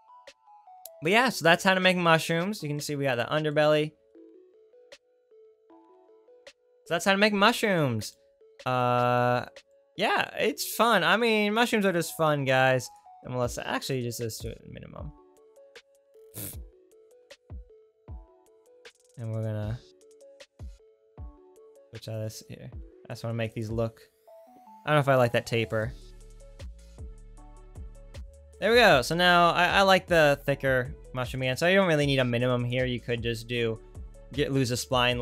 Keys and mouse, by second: 2.9 right click, 3.3 right click, 13.0-23.9 drag, 24.1-25.7 right drag, 25.7-35.2 drag.